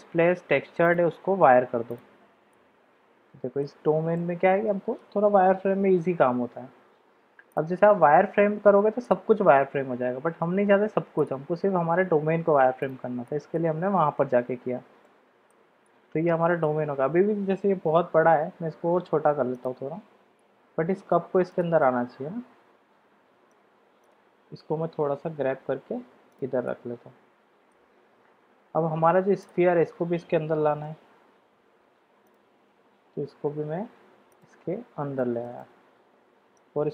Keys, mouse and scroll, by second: 0.8-2.0 drag, 2.5-3.6 middle drag, 4.1-5.1 middle drag, 5.5 g, 9.0 click, 11.2 click, 12.8 click, 13.2-13.5 middle drag, 15.0-15.5 shift+middle drag, 15.8-16.7 middle drag, 18.2 s, 20.0 g, 21.7-23.5 middle drag, 24.0 click, 24.9 g, 26.7-27.8 middle drag, 29.4 click, 30.5 g, 32.7 g, 35.1 shift+middle drag, 35.6-36.6 middle drag.